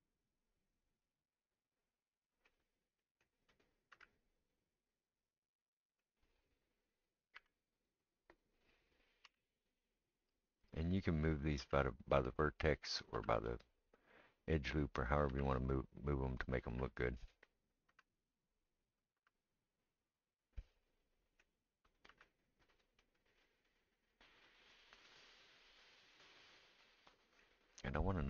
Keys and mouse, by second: 1.3-3.6 middle drag, 3.6 click, 3.6-23.9 right drag, 3.9 g, 7.5 1, 9.2 g, 11.5 click, 11.5 middle click, 11.6 g, 12.9 click, 13.2 g, 15.2 click, 15.2 middle click, 15.3 g, 16.5 click, 16.7 g, 17.7 click, 18.0 g, 19.0 click, 19.1 g, 21.9 click, 22.1 g, 23.9-26.6 middle drag, 26.6-28.2 right drag.